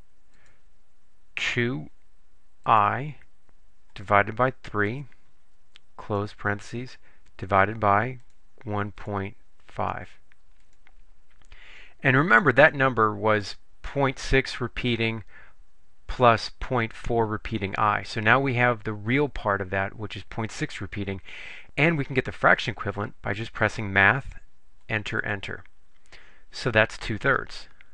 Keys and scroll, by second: 0.4 2, 2.8 ., 4.0 /, 5.0 3, 6.1 ), 7.4 /, 8.3 1, 9.0 ., 9.9 5, 10.7 Return, 24.9 Return, 25.3 Return.